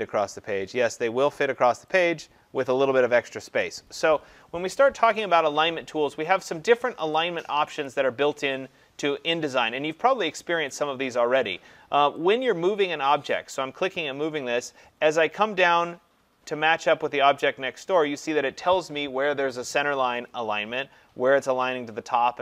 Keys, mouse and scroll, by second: 7.9 click, 10.8 click.